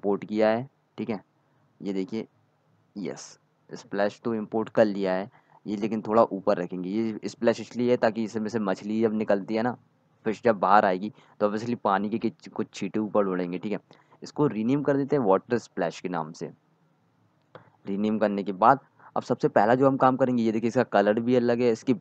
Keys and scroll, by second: 12.7-14.8 typing, 15.0 Return.